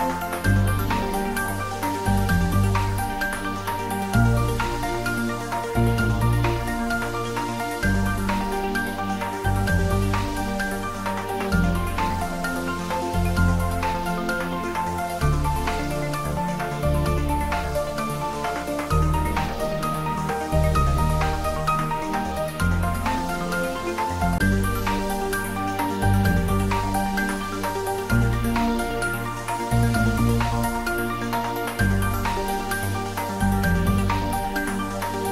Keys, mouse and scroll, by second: 6.6 click, 9.4 g, 10.4 click, 11.1 s, 12.4 click, 13.2 scroll up 1, 14.1 s, 15.4 click, 16.7 s, 18.2 click, 19.0 `, 19.7-20.6 scroll down 1, 20.6 click, 21.0-21.3 scroll up 1, 23.9-25.5 middle drag, 26.7 click, 28.8-29.2 scroll down 1, 30.2 click, 31.1-31.4 scroll up 1, 32.8-34.7 drag.